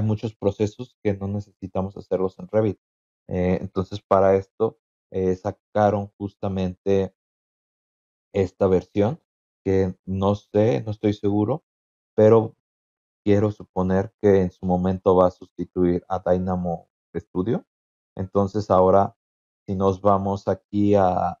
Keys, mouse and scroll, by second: 2.1-3.0 scroll down 4, 3.1-3.4 scroll up 2, 4.2 scroll up 2, 8.0 click, 9.1 BackSpace, 9.5 Return, 10.9 click, 13.8 click, 14.0 click, 18.5 click, 19.5-19.8 scroll up 2, 19.8 scroll down 2, 20.5-21.4 scroll up 1.